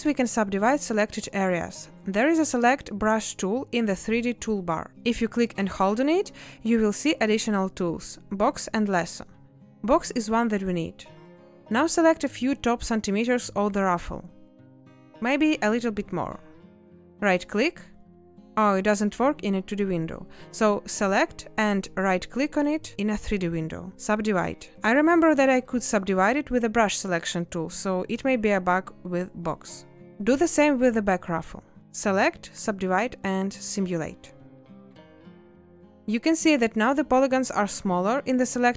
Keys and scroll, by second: 0.1 space, 32.6 space.